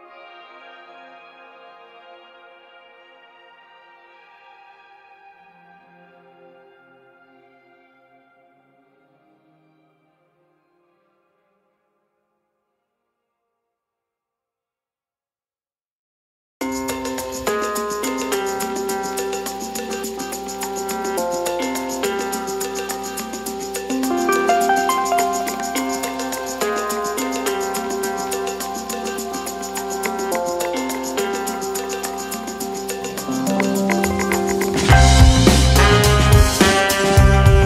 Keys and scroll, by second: 1.0 x, 1.2 v, 6.2 z, 10.1 Delete.